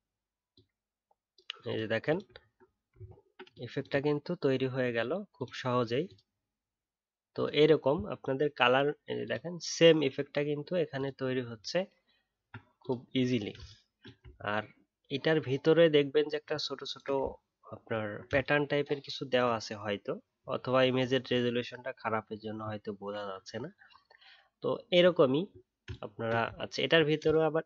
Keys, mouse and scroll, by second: 2.4 alt+scroll down 1, 3.0 alt+scroll up 1, 11.5-11.9 alt+scroll up 2, 17.8 alt+scroll up 10, 17.8-19.7 alt+scroll down 1, 20.1 alt+scroll down 1, 22.1 alt+scroll down 2, 23.4-25.1 alt+scroll up 1, 25.1 alt+scroll down 1.